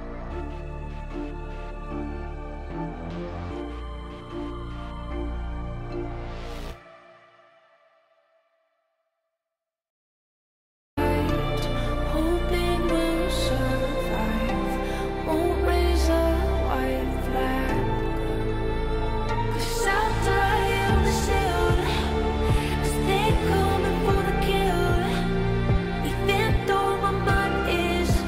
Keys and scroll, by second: 5.5 ctrl+z, 6.9 g, 13.5 Escape, 15.3 ctrl+shift+a, 17.6 F3, 22.3 Left, 27.3 shift+Page_Down.